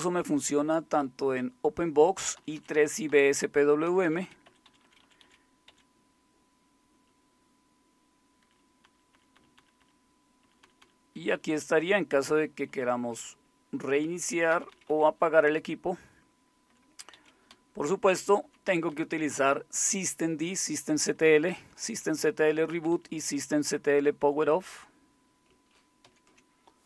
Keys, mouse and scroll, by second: 0.7-1.9 Right, 0.7 Up, 2.4 Down, 2.4 Right, 2.6 Down, 2.7 Down, 3.8 Down, 4.0 Up, 4.0 Right, 4.2 Down, 4.4 Up, 4.7 Up, 4.8 Up, 5.0 Up, 5.2 Up, 5.7 Up, 7.1 Down, 7.7 Down, 8.8 Down, 9.1 Down, 9.3 Down, 9.6 Down, 10.4 Down, 10.4 Down, 10.8 Down, 11.3 Down, 11.3 Up, 11.5 Up, 12.1-12.7 Up, 13.4 Right, 14.1 Right, 14.5 Down, 14.5 Right, 14.7 Down, 15.6 Left, 15.6-24.2 typing, 20.7 Right, 20.9 Right, 21.1 Right, 21.3 Right, 21.6 Right, 21.8 Right, 22.0 Right, 22.7 Right, 22.7 Down, 22.9 Down, 23.1 Down, 24.2 Up, 24.4 Up, 24.6 Up, 26.0 ctrl+x.